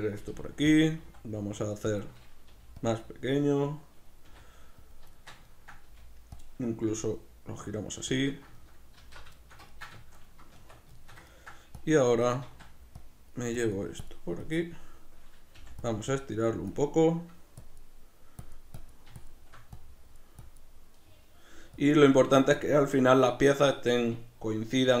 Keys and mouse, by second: 0.2 r, 0.9 click, 1.0 s, 2.0 click, 2.5 g, 2.9 click, 4.3 r, 4.9 click, 5.1-6.4 shift+middle drag, 5.9 g, 6.4 click, 6.9 r, 8.2 click, 8.5-11.8 shift+middle drag, 9.0 alt+q, 10.5 Tab, 11.8 click, 12.5 ctrl+z, 13.0 click, 15.9 click, 20.9 middle click, 21.7 click, 22.1 middle click, 22.6 click, 23.8-25.0 middle drag.